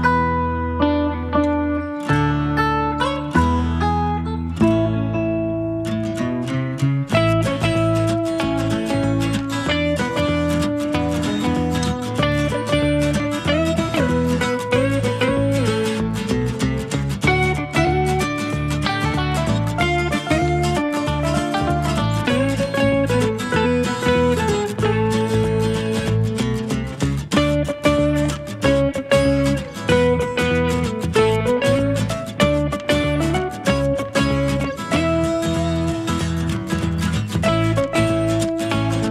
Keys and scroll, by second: 1.2 Escape, 1.9-2.6 typing, 5.0 space, 6.8 Escape, 13.6 space, 15.7 Escape, 18.9 space, 20.8 Escape, 21.1-21.8 typing, 23.8-24.9 typing, 27.4-28.6 typing.